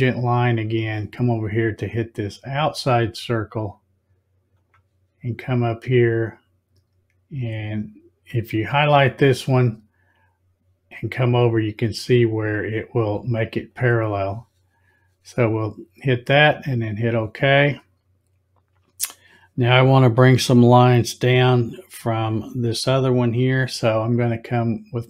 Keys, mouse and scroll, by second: 0.6 click, 4.6 click, 13.7 click, 16.6 click.